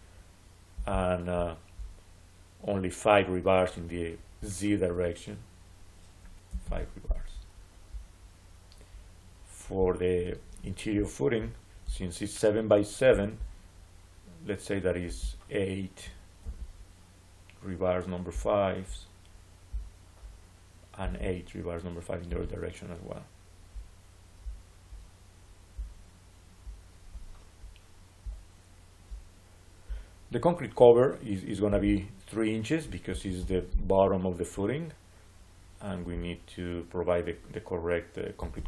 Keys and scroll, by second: 6.3 5, 6.5 Return, 16.3 7, 22.2 7, 32.9 3, 33.2 Return, 38.2 3, 38.4 Return.